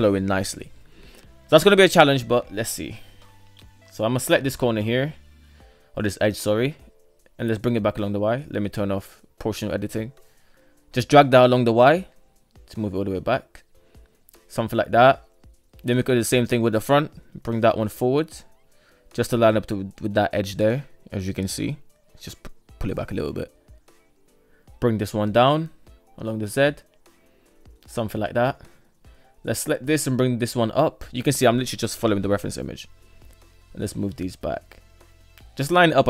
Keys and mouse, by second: 0.6 shift+middle drag, 1.2 Tab, 2.1 alt+z, 2.6 shift+middle click, 2.6 shift+KP_1, 4.0 shift+right click, 4.9 g, 8.7 click, 9.9 g, 14.5 shift+middle click, 15.3 right click, 15.7 shift+right click, 16.3 g, 18.9 shift+middle drag, 19.7-20.3 shift+middle drag, 21.0 g, 23.1 right click, 24.5 g, 26.7 shift+middle click, 27.5 shift+middle click, 28.2 right click, 29.0 g, 31.3 shift+right click, 32.1 g, 34.3 right click, 34.8 g.